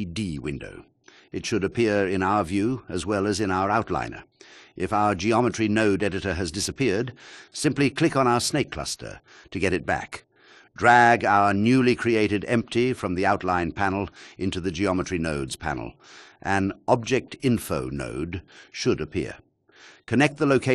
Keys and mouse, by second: 1.3 shift+a, 16.1 alt+shift+middle click, 17.2 click.